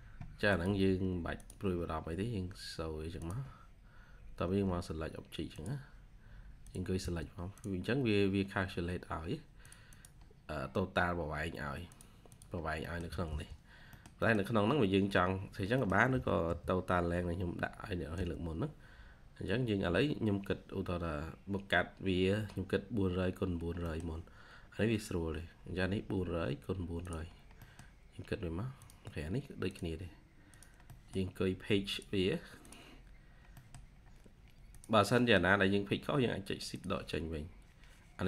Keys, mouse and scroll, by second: 6.9 space, 8.1 scroll up 1, 9.8 double click, 10.1-10.5 scroll down 1, 11.3-12.2 scroll up 1, 12.2 double click, 12.5 scroll down 1, 12.7 middle click, 12.9 typing, 13.6 scroll down 1, 13.8 middle click, 14.5-14.9 scroll up 1, 15.2-15.7 scroll down 1, 15.7 middle click, 16.0 typing, 18.9 scroll up 1, 19.0-19.7 typing, 20.6-21.0 scroll up 1, 20.8-23.0 typing, 21.9 scroll down 1, 23.4-23.7 scroll down 1, 23.7 middle click, 24.2-24.6 scroll up 1, 25.3-25.8 scroll down 1, 25.8-26.1 scroll up 1, 27.2-27.5 scroll down 1, 27.5 middle click, 30.8 middle click, 33.5 middle click, 33.9-34.8 scroll up 1, 35.0 scroll up 1, 35.1 middle click, 35.8 scroll down 1.